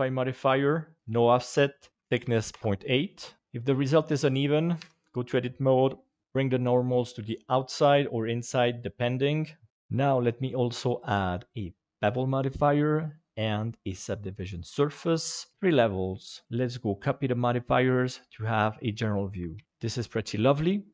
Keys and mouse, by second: 1.1 click, 1.9 click, 3.4 ctrl+z, 4.8 Tab, 6.2 alt+n, 6.2 a, 10.1-12.0 drag, 13.2-14.3 drag, 16.5-18.4 drag, 19.5 alt+a.